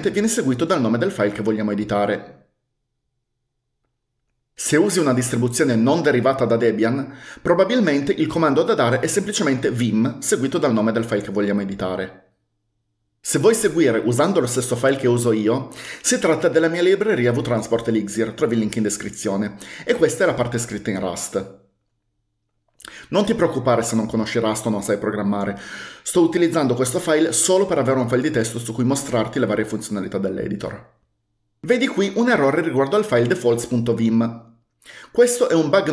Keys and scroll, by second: 21.9 Return.